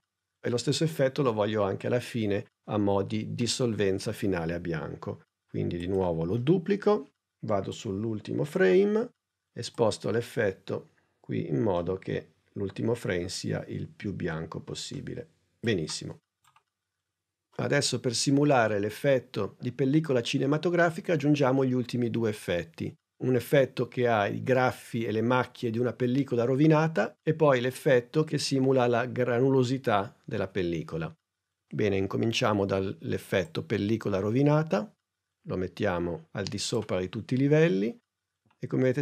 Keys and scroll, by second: 6.3 super+d.